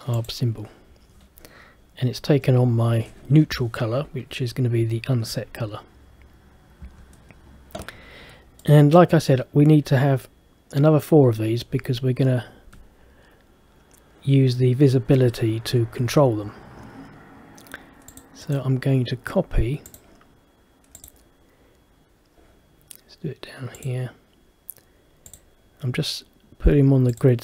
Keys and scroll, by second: 6.9 Escape.